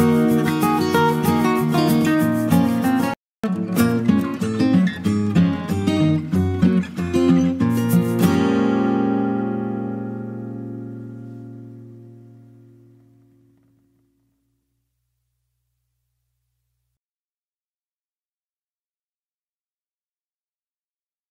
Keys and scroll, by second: 7.0 ctrl+space, 9.0 f, 9.6 f.